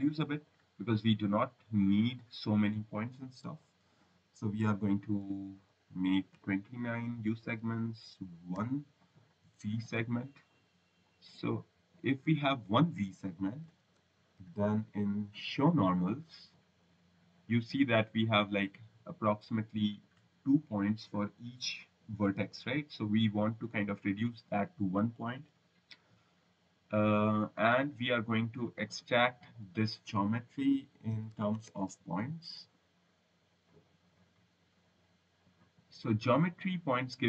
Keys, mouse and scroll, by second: 0.3 click, 4.5 9, 5.1 BackSpace, 5.4 2, 6.2 9, 7.4 Tab, 10.8 click, 12.1 click, 13.4-15.1 typing, 16.2 click, 19.3 click, 20.2 scroll, 22.2 click, 24.1 click, 25.3 Delete, 26.5 click, 27.2 click, 29.2 click, 30.0-32.1 typing, 33.6 click, 34.0 click, 34.9 click, 35.8 click.